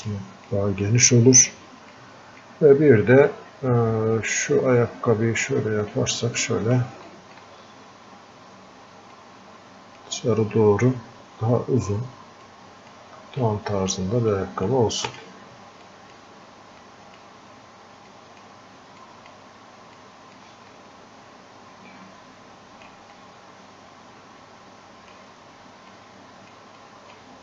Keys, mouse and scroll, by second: 0.9 click, 2.0-3.3 drag, 3.3-7.1 drag, 9.2-12.3 drag, 12.5 click, 13.5 click, 14.4 click, 15.1-25.9 drag, 25.9 click, 26.8-27.4 drag.